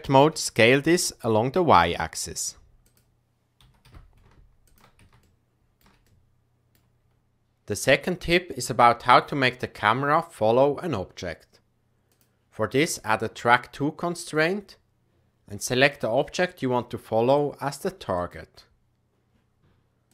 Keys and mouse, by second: 3.5 g, 5.4-5.8 shift+middle drag, 6.2 middle click, 12.1 click, 13.0-14.4 drag, 15.8 click.